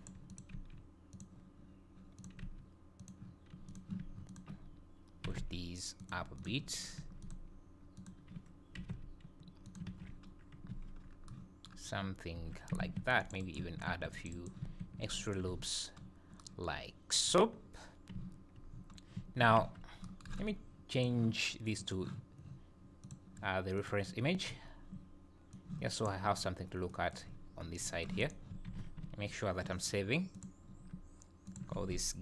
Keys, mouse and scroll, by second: 0.3 click, 0.5 g, 2.2 click, 2.4 g, 3.7 click, 4.3 ctrl+click, 5.3 g, 6.4 click, 7.8 click, 8.0 ctrl+click, 8.5 click, 8.8 g, 9.9 alt+a, 10.3 scroll down 1, 10.7 Tab, 11.0 scroll down 2, 12.1 scroll up 1, 12.4 Tab, 13.0 ctrl+r, 13.9 ctrl+r, 14.8 ctrl+r, 15.5 Tab, 16.0 scroll down 5, 17.2-17.6 scroll up 3, 18.7 scroll down 2, 19.6 z, 20.9 click, 23.1 click, 24.5 scroll down 5, 25.5 click, 26.9 middle click, 27.3 scroll up 4, 27.6 scroll down 2, 27.9 middle click, 28.2 click, 28.7 ctrl+s.